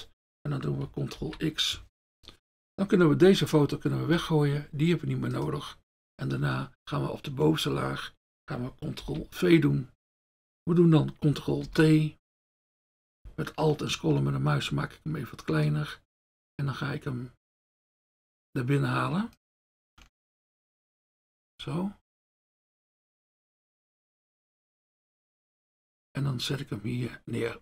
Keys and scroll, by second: 1.2 ctrl+x, 3.3 F1, 9.0 ctrl+v, 11.7 ctrl+t.